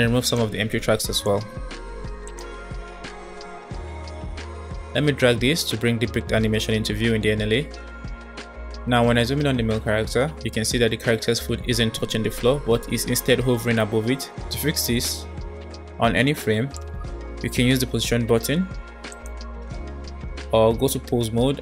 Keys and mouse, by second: 0.2 click, 0.6 Delete, 1.3 Delete, 2.8 Delete, 4.9-7.0 middle drag, 11.3 space, 15.8 space, 19.1-20.2 shift+drag, 20.8 Tab, 20.9 Tab.